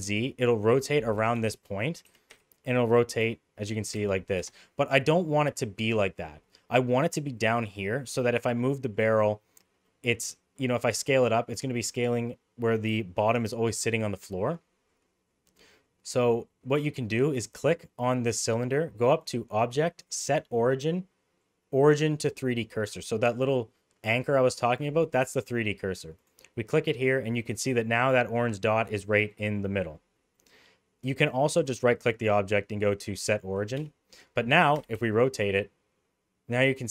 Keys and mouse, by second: 2.0 r, 3.8 r, 7.3-8.2 middle drag, 8.6 middle click, 9.8-10.2 middle drag, 10.5 middle click, 19.1-26.2 drag, 29.2 middle drag, 30.3-30.9 middle drag, 31.5-33.9 right drag, 34.7 r.